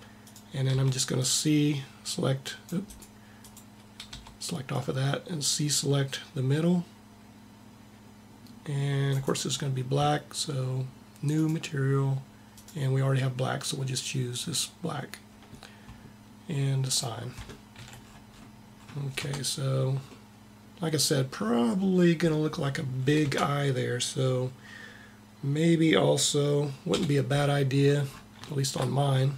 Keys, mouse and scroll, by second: 0.0-1.6 drag, 0.5 c, 1.7 click, 3.3 click, 3.9 c, 8.8-10.6 drag, 11.2-14.3 drag, 16.6-17.7 drag, 17.7 a, 19.0 Tab, 23.0 Tab, 26.7 KP_1, 27.5 middle click.